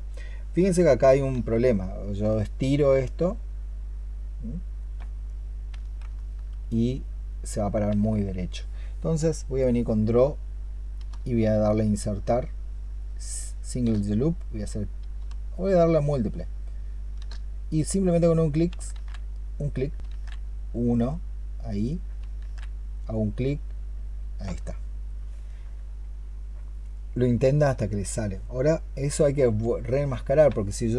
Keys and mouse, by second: 1.2 ctrl+z, 6.0 alt+click, 11.4-13.7 space, 15.0-17.1 space, 18.8 ctrl+z, 20.0 ctrl+z, 22.3 ctrl+z, 25.3 alt+click.